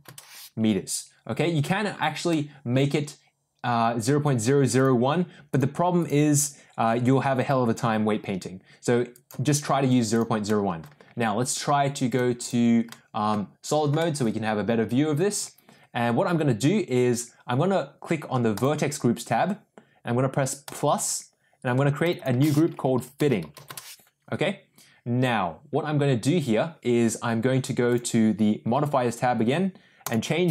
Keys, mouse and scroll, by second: 2.3-3.7 middle drag, 4.7-10.2 drag, 10.5 middle click, 12.1 click, 12.4 click, 12.8-13.2 middle drag, 13.9 shift+middle click, 20.6 click, 22.1-24.3 shift+drag, 23.1 t, 27.9 click, 30.1-30.5 drag.